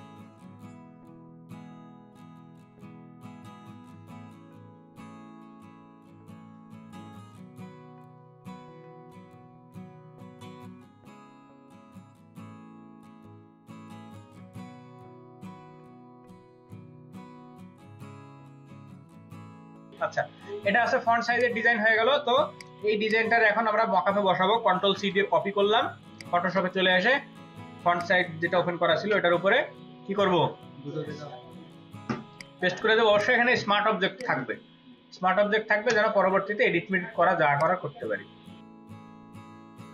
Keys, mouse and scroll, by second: 12.1 double click, 12.9 ctrl+space, 13.0 ctrl+alt+click, 13.7 space, 18.0 space, 18.7 ctrl+alt+click, 21.3 space, 23.1 double click, 24.6 ctrl+c, 24.8 ctrl+c, 26.2 space.